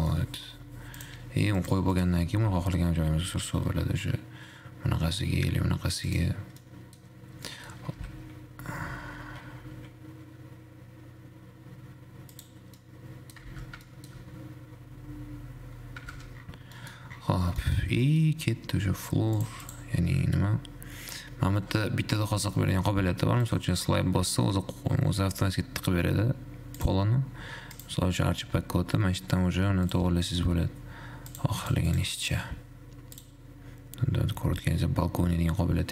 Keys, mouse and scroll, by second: 0.4-1.3 middle drag, 1.3 click, 2.1 click, 3.0 g, 6.9-7.6 middle drag, 7.6-8.6 scroll up 2, 8.6 g, 13.4 middle click, 13.9 shift+z, 14.1 shift+middle click, 14.4-16.4 scroll up 10, 16.4 shift+z, 16.6-16.9 scroll down 1, 16.9-17.4 middle drag, 17.4-18.0 scroll down 4, 18.0 shift+middle click, 18.1-18.4 scroll down 1, 18.4-19.5 middle drag, 19.5-19.9 drag, 23.7 click, 24.9-27.0 middle drag, 27.0 click, 27.9 click, 30.4 click, 31.5 click, 32.1 click, 33.4-35.9 drag.